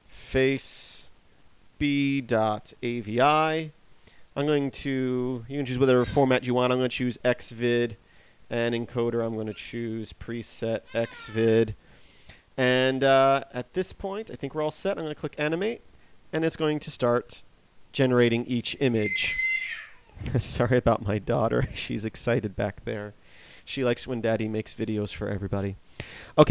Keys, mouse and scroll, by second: 11.3 click, 16.3 click.